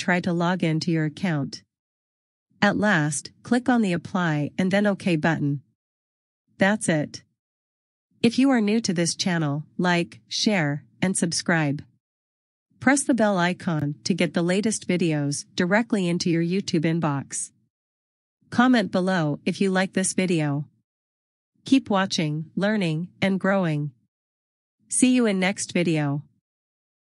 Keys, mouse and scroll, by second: 4.8 click, 9.1 click.